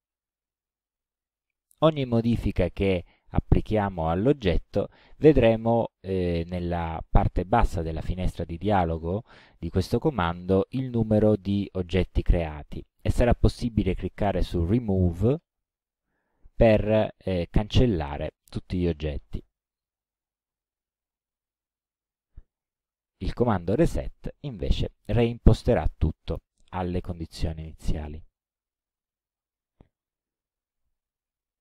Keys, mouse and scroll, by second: 2.4-5.5 drag, 15.4 click, 19.1-20.1 drag, 23.9 click, 25.5 click, 29.7-30.7 middle drag, 31.3 ctrl+scroll up 1.